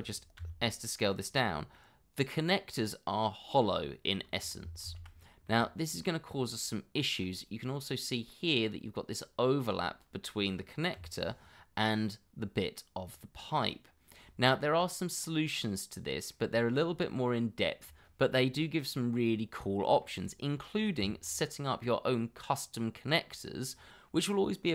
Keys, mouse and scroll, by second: 0.4 s, 1.7 middle click, 4.8 ctrl+z, 5.4 middle click, 6.3 scroll down 1, 6.6 middle click, 7.2 scroll up 1, 7.6 middle click, 8.5 scroll up 1, 9.6 scroll down 1, 10.9 l, 11.6-12.5 scroll up 1, 13.1 scroll down 1, 13.5 middle click, 14.1 scroll down 1, 14.4 shift+middle click, 14.9 middle click, 16.5 shift+middle click, 17.0 middle click, 21.0 Tab.